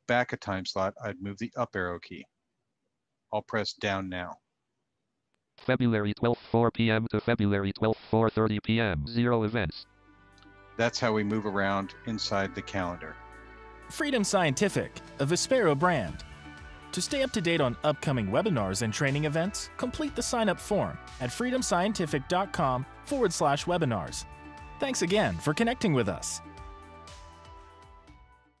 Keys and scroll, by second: 3.1 Down.